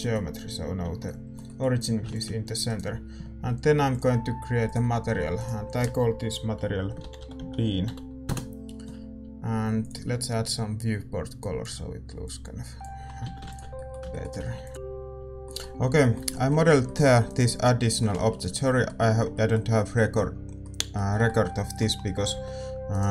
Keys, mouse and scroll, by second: 2.6 ctrl+s, 2.6-8.2 drag, 2.6-4.7 right drag, 2.6 a, 10.4-12.2 drag, 13.7 ctrl+s, 13.7-23.1 middle drag, 13.7 a, 17.3-19.2 right drag, 22.2 g.